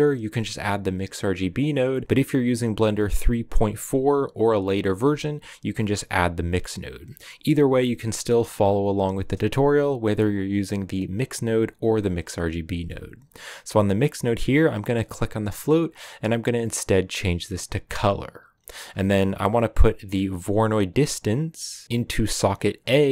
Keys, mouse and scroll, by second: 17.9-22.7 drag.